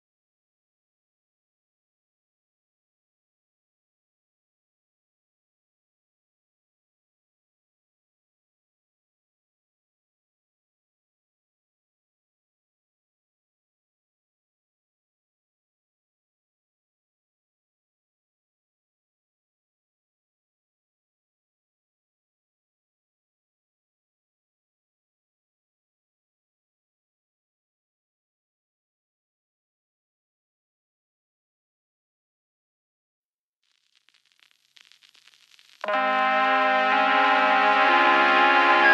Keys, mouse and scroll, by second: 0.0-1.9 drag, 9.0-12.5 drag, 10.6 Tab, 11.5 scroll up 1, 12.5 Tab, 14.8 g, 17.9 click, 19.2 Tab, 20.0-20.6 shift+middle drag, 20.6 click, 21.6-23.7 middle drag, 21.6 KP_0, 23.7 click, 24.1 scroll down 1, 25.0-27.1 shift+middle drag, 27.1 click, 28.8-30.2 scroll up 1, 30.9-32.4 shift+middle drag, 32.4 click, 34.2 z, 34.4 scroll up 1, 35.1-37.1 shift+middle drag, 36.3 2, 37.1 alt+click, 38.6 s.